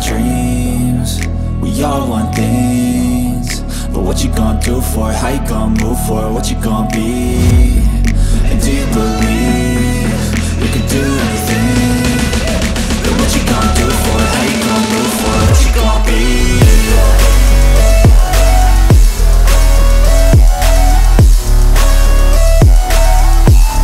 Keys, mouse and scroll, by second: 0.6 ctrl+super+z, 1.5 ctrl+super+z, 2.5 ctrl+super+z, 3.2 ctrl+super+z, 5.0 ctrl+super+z, 5.6 right click, 6.6 ctrl+super+z, 8.2 ctrl+super+z, 10.0 ctrl+super+z, 10.6 ctrl+super+z, 12.9 ctrl+super+z.